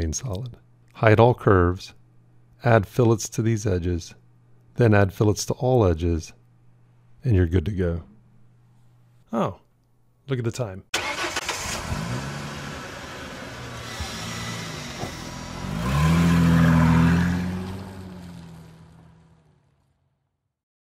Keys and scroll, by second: 5.2 ctrl+2.